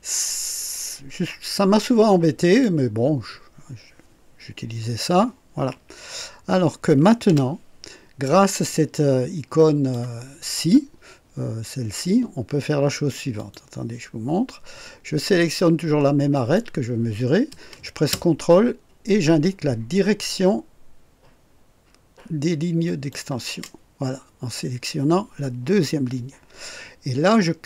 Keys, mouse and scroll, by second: 7.2 Delete, 8.7-10.1 drag, 13.3 click, 16.3 click, 22.8 ctrl+click.